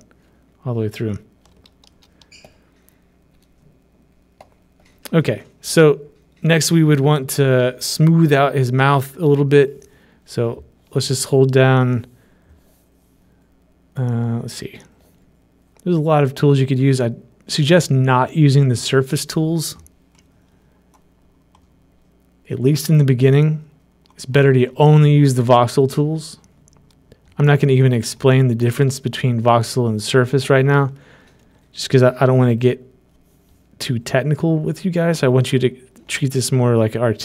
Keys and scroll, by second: 2.1 ctrl+alt+z.